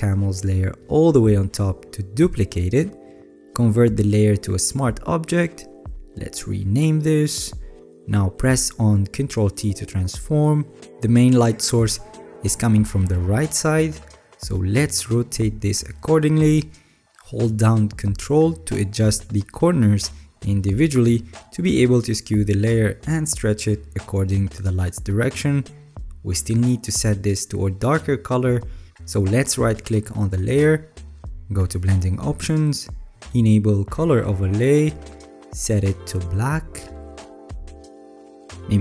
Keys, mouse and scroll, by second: 1.3 alt+click, 9.4 ctrl+t, 17.1 alt+scroll up 2, 17.7-19.1 middle drag, 17.7 alt+scroll, 19.3 ctrl+click, 21.5 ctrl+click, 22.0 ctrl+click, 25.6-27.4 ctrl+drag.